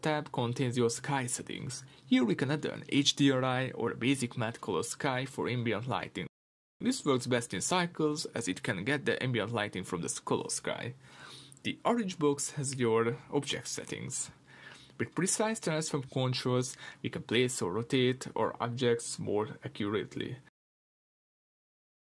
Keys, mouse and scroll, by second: 3.2 click, 5.3-13.5 middle drag, 13.5 click, 14.5-22.0 drag, 17.7 Return, 21.6 Return.